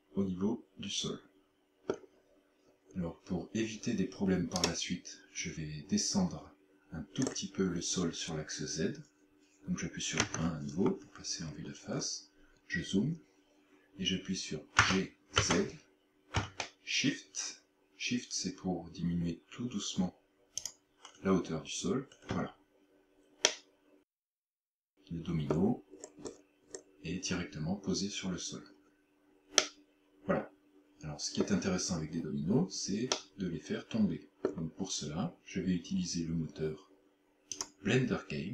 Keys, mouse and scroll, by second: 2.7 scroll down 3, 4.7 right click, 7.2 scroll up 3, 10.2 KP_1, 11.5-12.4 scroll up 10, 14.8 g, 20.7 shift+click, 23.5 middle click, 26.0-26.9 scroll down 14, 29.6 middle click, 33.2 middle click, 37.6 click.